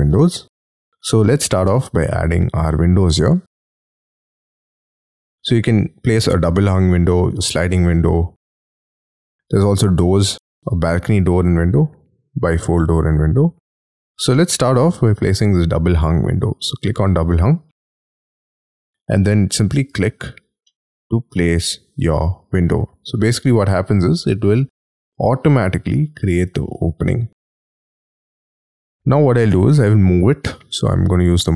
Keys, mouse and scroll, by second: 2.6 middle click, 16.8 click, 18.1-18.5 scroll up 3, 20.6 middle click, 23.0-23.7 scroll up 13, 23.7 middle click, 27.6-28.8 scroll down 9, 28.8-29.8 scroll down 2, 29.8 m, 31.3-31.5 scroll up 4.